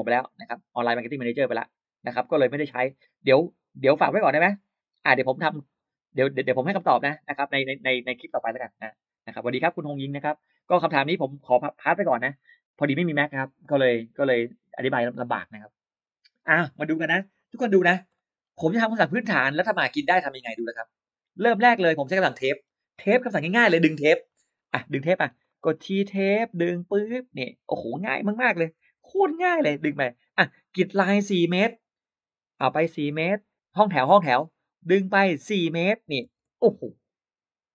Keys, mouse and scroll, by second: 17.7 click, 18.0 middle click, 18.2 scroll up 1, 20.1-21.1 drag, 21.5 middle click, 21.6-21.9 scroll up 1, 22.2 middle click, 22.4 scroll up 1, 24.5 middle click, 24.9-25.4 scroll down 2, 25.3 middle click, 25.4 scroll up 1, 26.2 t, 27.0 click, 28.5 4, 28.8 Return, 30.2 scroll up 1, 31.2 click, 32.4 4, 33.0 Return, 33.9 scroll up 1, 34.9 click, 36.1 4, 36.2 Return, 37.1 Return.